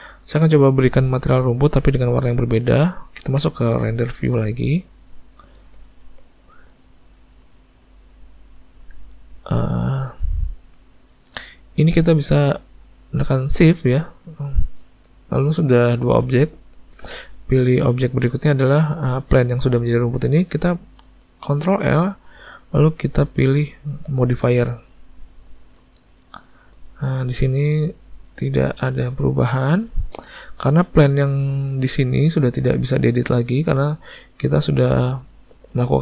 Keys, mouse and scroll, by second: 1.3 ctrl+middle click, 3.4 z, 13.6 shift+click, 21.8 ctrl+l, 30.0 click, 30.8 click.